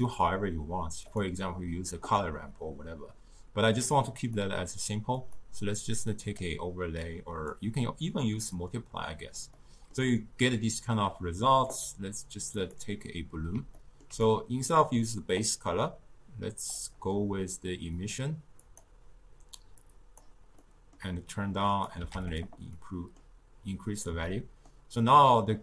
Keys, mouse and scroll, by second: 1.1-4.2 drag, 5.2 click, 8.6-9.6 drag, 9.6-11.7 middle drag, 11.7 click, 12.6 click, 13.8-15.3 ctrl+middle drag, 15.3 click, 18.0 click, 18.6 click, 20.6-21.8 middle drag, 21.8 click, 22.8-25.6 middle drag.